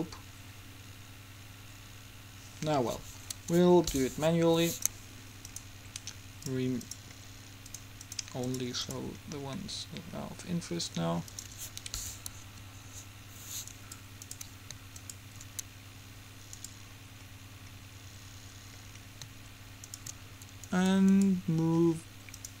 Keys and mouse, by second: 5.1-10.8 drag, 10.8 middle click, 11.5-12.6 drag, 12.6 Home, 18.3 middle click, 21.3-22.6 right drag.